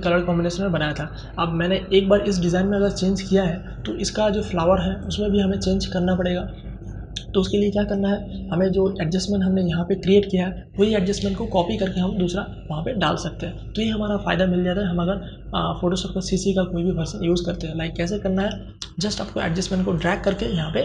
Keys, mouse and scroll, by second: 1.0 click, 3.9 click, 6.8 click, 18.8-20.8 shift+drag.